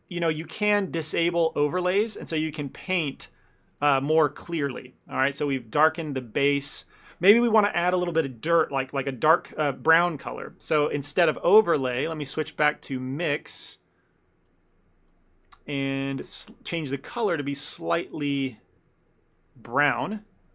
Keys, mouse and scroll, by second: 1.4 click, 2.8 ctrl+z, 3.3 ctrl+z, 3.8 shift+middle click, 4.0 ctrl+middle click, 4.7 click, 5.1 click, 5.4 click, 5.7 click, 6.2 ctrl+middle click, 6.7 ctrl+middle click, 6.8 shift+middle click, 7.1 shift+middle click, 7.2 ctrl+middle click, 13.0 middle click, 14.5 click, 16.6 middle click, 17.5 click.